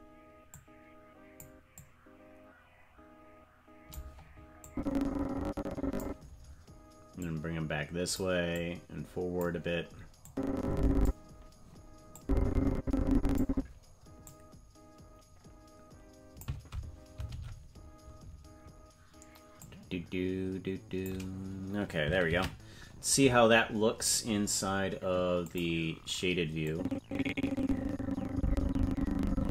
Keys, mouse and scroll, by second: 0.5 click, 1.7-4.0 drag, 4.6-6.0 drag, 7.2 click, 8.5 click, 10.2 click, 12.1-13.4 drag, 14.2-16.4 drag, 17.3 alt+r, 19.6-21.1 drag, 24.7 ctrl+s, 25.6 click, 26.7-29.5 drag.